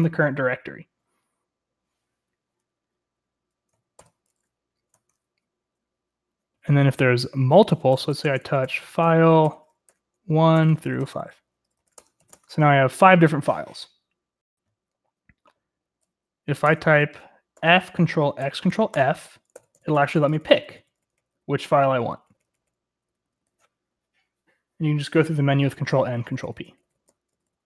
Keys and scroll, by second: 4.9 Escape, 4.9 typing, 7.9-12.7 typing, 16.4 o, 16.6 Return, 17.6 f, 18.4 ctrl+x, 18.9 ctrl+f, 19.5 ctrl+n, 19.7 ctrl+n, 19.9 ctrl+n, 20.2 ctrl+n, 20.3 ctrl+n, 20.7 ctrl+n, 21.0 ctrl+n, 21.3 ctrl+p, 21.5 ctrl+p, 21.6 ctrl+p, 21.8 ctrl+p, 22.0 ctrl+n, 22.5 ctrl+n, 22.6 ctrl+n, 23.1 ctrl+p, 23.3 ctrl+p, 23.5 ctrl+p, 25.5 ctrl+n, 25.7 ctrl+n, 25.9 ctrl+p, 26.0 ctrl+p, 26.3 ctrl+p, 26.4 ctrl+n, 26.6-26.9 ctrl+n, 27.1 ctrl+p, 27.2 ctrl+p, 27.5 ctrl+p.